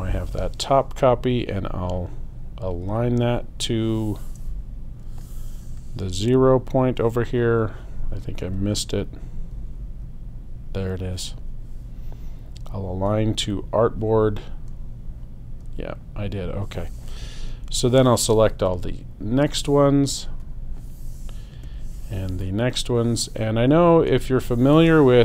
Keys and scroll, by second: 9.5 Right.